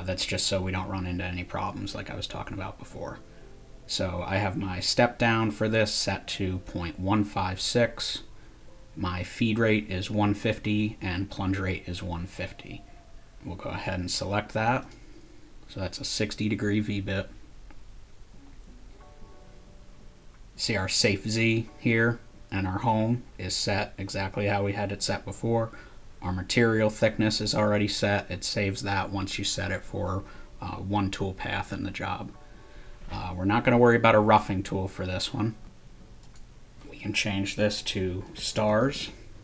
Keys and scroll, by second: 38.1-39.4 typing.